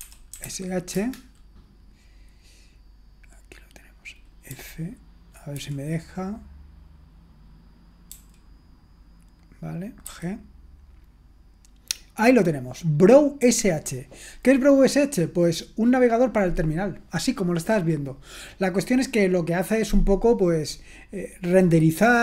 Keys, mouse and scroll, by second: 0.0-0.9 typing, 4.5 typing, 5.6 typing, 8.1 f, 10.0 g.